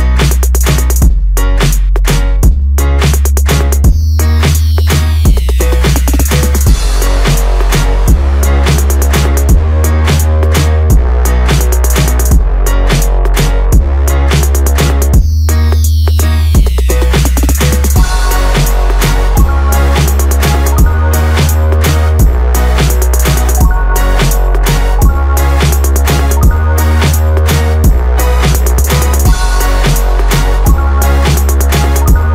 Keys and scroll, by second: 7.8 Return, 9.5 ctrl+Return, 11.1 ctrl+j, 24.6 BackSpace.